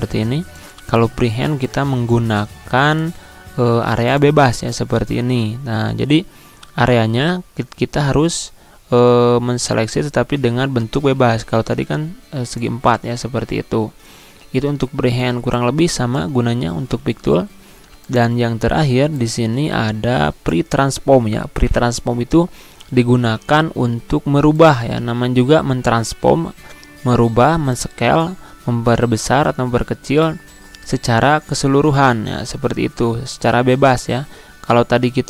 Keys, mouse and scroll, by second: 14.9 click, 17.0 ctrl+z, 17.8-24.3 drag, 29.9-35.2 drag.